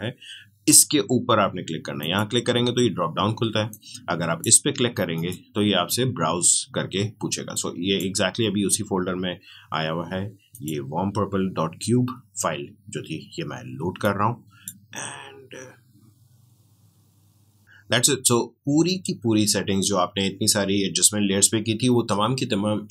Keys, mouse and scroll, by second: 1.9-10.4 drag, 14.0-17.0 drag.